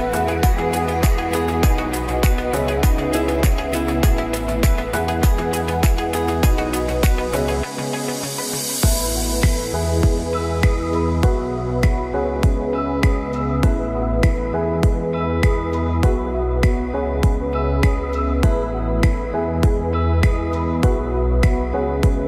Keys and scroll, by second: 14.9 ctrl+t.